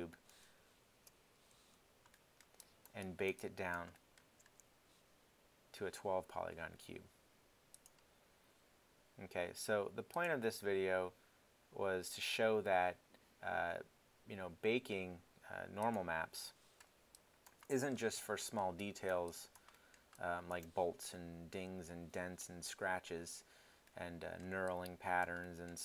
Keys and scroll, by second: 0.3 super+Tab.